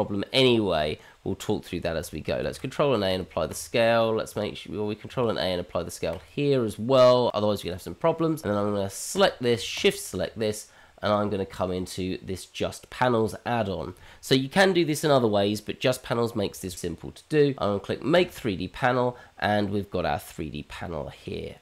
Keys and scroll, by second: 2.4 ctrl+a, 5.4 ctrl+a.